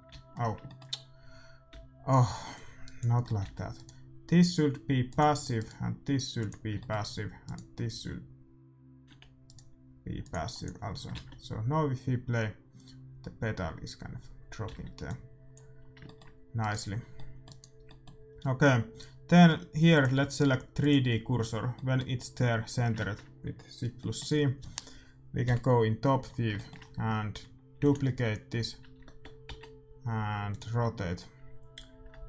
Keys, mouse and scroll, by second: 0.1 alt+a, 0.3-2.3 middle drag, 1.7 a, 2.5-4.4 drag, 3.2-4.4 middle drag, 3.6 a, 3.9-9.2 right drag, 5.0-9.0 drag, 5.0-6.6 middle drag, 9.0 g, 10.2-12.4 drag, 11.1 alt+a, 14.7 alt+a, 15.0-16.9 drag, 15.7-19.6 middle drag, 16.9-18.5 right drag, 19.9-21.7 drag, 21.7-26.3 middle drag, 25.4 KP_7, 26.5-28.6 middle drag, 27.7 shift+d, 28.9 r.